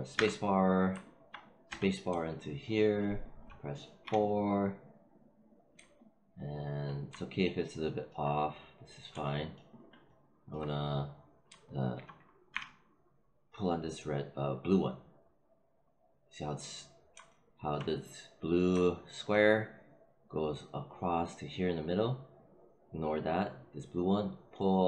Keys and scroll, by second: 0.3 space, 1.6 space, 4.0 4, 12.4 r.